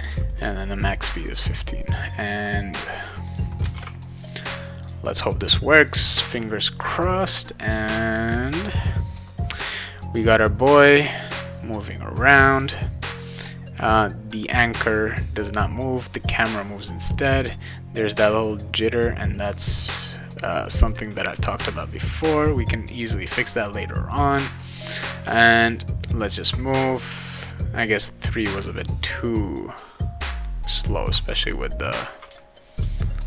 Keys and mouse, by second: 0.3 click, 3.3 click, 3.7 ctrl+s, 4.7 click, 9.8 click, 25.6 w, 27.1 shift+w, 31.3 s, 32.3 d, 32.8 w.